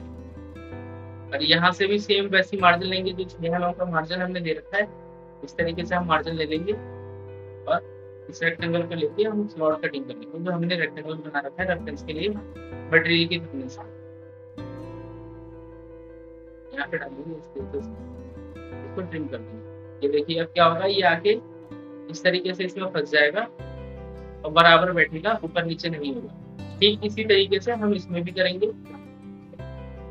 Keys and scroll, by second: 25.4 ctrl+z.